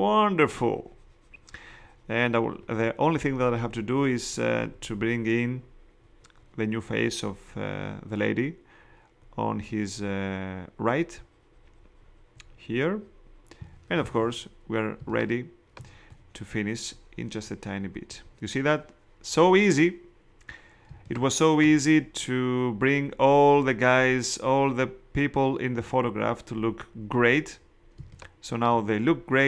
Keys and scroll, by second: 15.0 space, 20.8 space, 27.9 space.